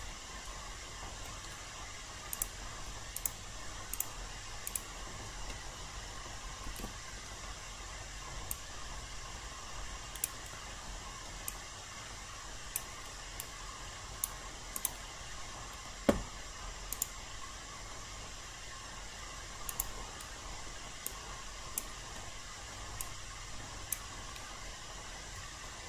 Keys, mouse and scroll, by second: 0.5 alt+middle click, 2.3 click, 3.1 shift+click, 3.9 shift+click, 4.7 shift+click, 6.7 ctrl+e, 8.5-10.5 drag, 10.9 alt+middle click, 11.5 alt+click, 13.4 right click, 14.7 click, 15.3 alt+middle click, 16.9 click, 20.5 alt+middle click, 21.1 alt+click, 22.1 alt+middle click, 23.0 alt+click.